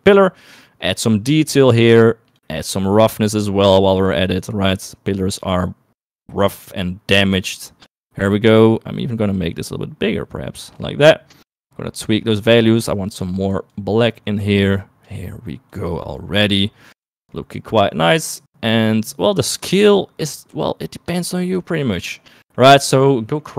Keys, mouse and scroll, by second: 1.3-2.5 drag, 2.9-3.9 drag, 4.3-6.2 drag, 6.6-8.2 drag, 8.6-10.9 drag, 11.6 middle click, 12.5-13.6 drag, 14.2-15.2 drag, 16.1-17.2 drag, 17.6 middle click, 18.2-21.5 drag, 22.3 middle click.